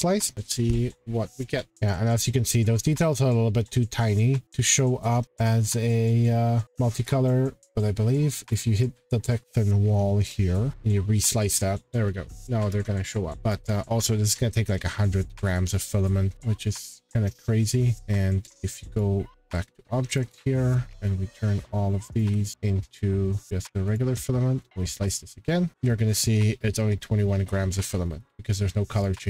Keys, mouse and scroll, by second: 0.7 scroll, 1.7-2.3 scroll, 1.8 click, 5.4 click, 6.6 click, 8.5 click, 10.4 click, 11.8 scroll, 12.4 click, 13.0 scroll, 13.3 scroll down 11, 13.5 click, 13.5 scroll, 16.8 click, 19.0 click, 20.1 click, 21.0-21.4 scroll, 22.1 shift+click, 22.5 right click, 23.0 click, 23.4 click, 23.6 scroll down 4, 23.9 click, 24.0 shift+click, 24.7 click, 25.1 shift+click, 27.7 middle click, 27.8 middle click, 29.0 click, 29.2 middle click, 29.2 middle click.